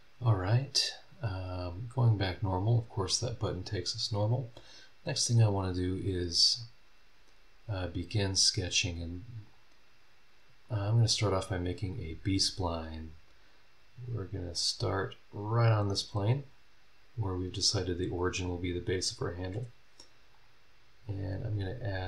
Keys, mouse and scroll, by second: 1.3 click, 9.4 click, 10.6 click, 14.5 click, 20.3 click, 21.3 click, 21.9 click.